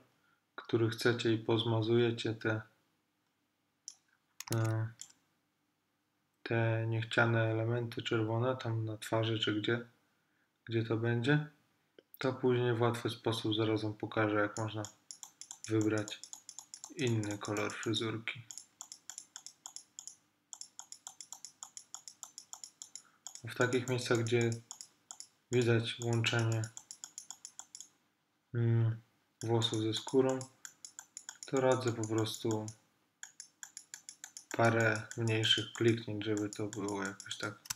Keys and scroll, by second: 4.6 super+z.